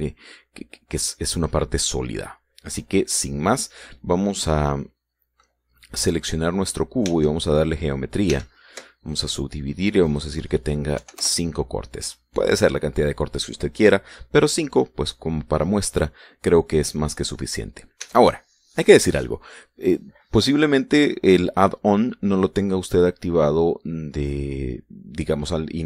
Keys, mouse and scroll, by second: 6.0 click, 7.6 Tab, 8.8 w, 9.6 click, 10.6 click, 11.5 KP_5, 11.7 KP_Enter, 18.5 Tab.